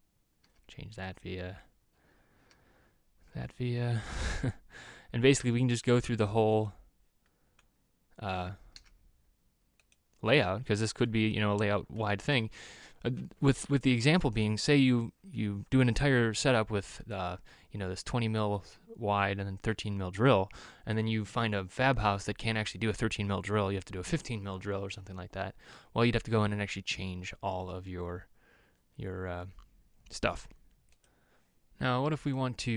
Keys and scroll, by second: 3.0 e, 5.4-6.0 typing, 9.3 e.